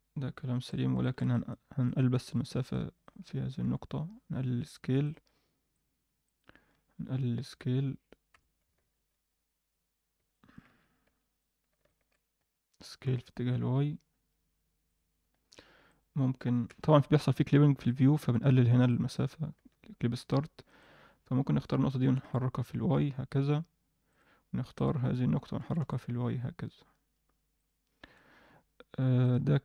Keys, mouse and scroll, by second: 0.9 alt+shift+middle drag, 1.3 middle click, 1.8 click, 2.1 Tab, 2.6 click, 3.0 shift+click, 3.6 s, 5.7 click, 6.2 click, 6.6-7.3 scroll up 1, 7.3-8.6 scroll up 1, 7.3 s, 8.7 ctrl+z, 9.1 ctrl+z, 9.9 scroll down 1, 10.3 middle click, 10.6 Tab, 11.0 Tab, 11.4 click, 11.8 shift+click, 12.3 s, 15.1 scroll up 1, 15.8 click, 16.6 n, 17.7 click, 18.8 click, 19.5 n, 20.6 click, 22.0 g, 24.7 click, 25.6 g, 27.8-28.2 scroll down 2, 28.0 Tab, 29.2 click.